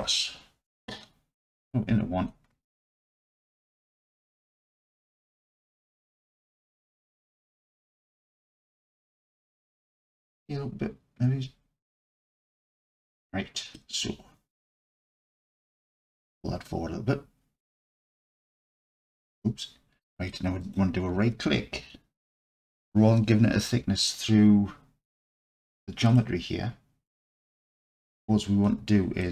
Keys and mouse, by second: 1.5 KP_1, 4.0-6.7 drag, 10.0 s, 12.2 click, 13.0-13.8 alt+middle drag, 16.4-17.6 drag, 18.2 Tab, 19.3 Tab, 26.1 click, 27.7 click, 28.6-29.3 alt+drag.